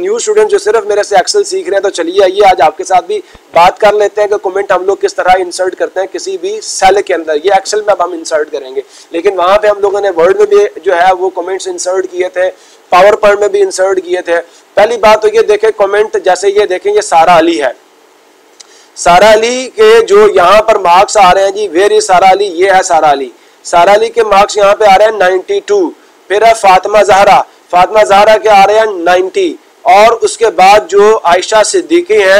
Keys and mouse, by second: 0.7 click, 17.7-18.8 drag, 22.1-23.1 drag, 29.2-30.2 drag.